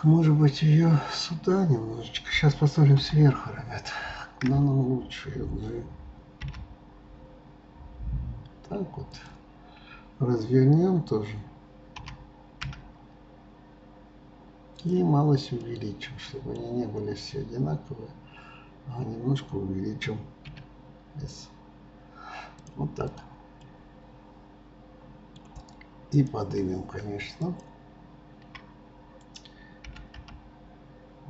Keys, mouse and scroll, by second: 3.1 KP_7, 15.7-17.4 middle drag, 17.4 scroll down 2, 23.3-23.8 drag, 23.9-26.6 middle drag, 26.6 drag, 27.4 shift+click, 29.9 g.